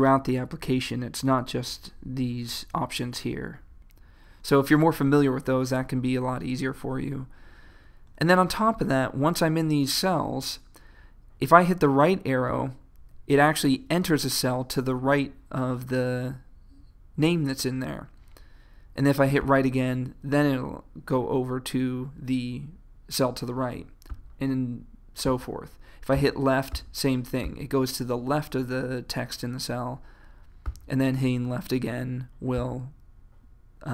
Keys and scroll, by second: 12.5 Right, 19.4 Right, 24.2 Right, 26.2 Left, 30.7 Left.